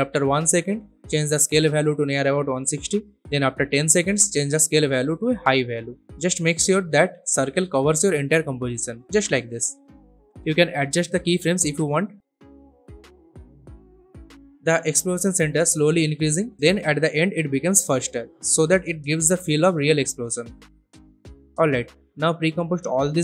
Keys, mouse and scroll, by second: 13.7 space, 16.5 space, 17.1-20.2 drag, 23.0 shift+click.